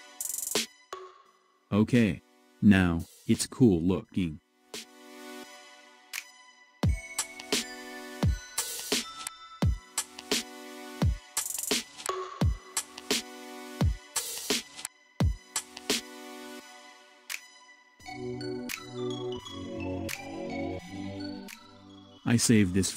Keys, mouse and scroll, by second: 0.5 scroll up 2, 3.8-4.8 drag, 6.3-9.3 middle drag, 14.4-14.7 scroll down 2, 14.7-16.3 middle drag, 16.3 scroll down 3, 17.7 KP_1, 18.7 scroll up 1, 19.2-20.8 shift+middle drag, 20.8-22.6 scroll down 1, 22.6 ctrl+s.